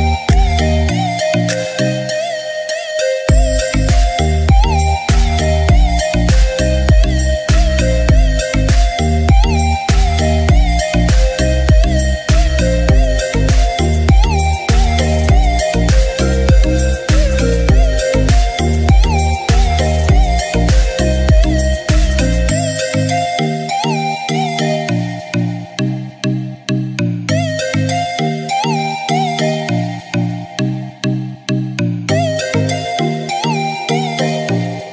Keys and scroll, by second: 2.5 ctrl+shift+a, 32.5 ctrl+shift+a.